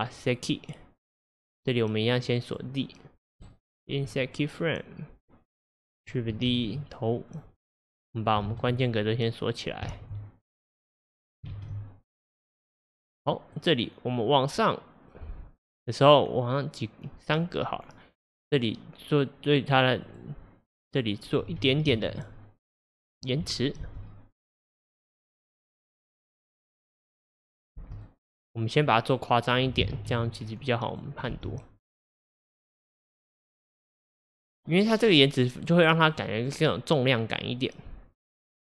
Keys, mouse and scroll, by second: 2.3-3.5 drag, 3.5 right click, 3.6 click, 4.2-5.6 right drag, 5.6-6.6 drag, 6.6 shift+d, 8.5 shift+d, 10.0 shift+d, 11.6 shift+d, 13.9-17.4 drag, 20.1 click, 21.5 g, 23.8 space, 27.8 space, 28.1-29.9 drag, 29.9 g, 31.3 space, 34.0-35.0 scroll down 2.